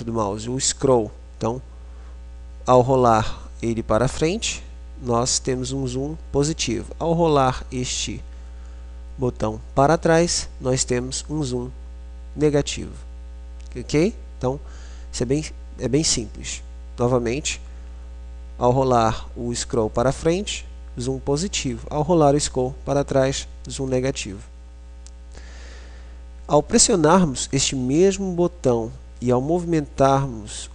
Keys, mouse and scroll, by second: 1.3-29.1 middle drag.